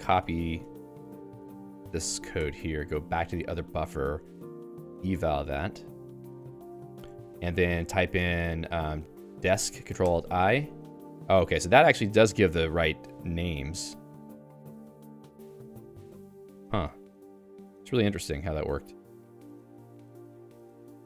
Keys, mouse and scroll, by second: 0.7 ctrl+g, 1.0 shift+v, 1.5 k, 2.3 y, 3.0 ctrl+alt+j, 3.5 Return, 4.5 alt+:, 5.3 shift+Insert, 5.9 Return, 6.8-9.9 typing, 10.1 ctrl+alt+i, 11.5 Down, 12.0 Down, 12.6 Down, 13.0 Down, 13.4 Down, 13.6 Up, 14.0 Up, 14.2 Up, 14.4-17.8 Down, 18.0 Down, 18.2 Down, 18.6 Down, 18.7 Down, 19.0 ctrl+g, 19.5 ctrl+g.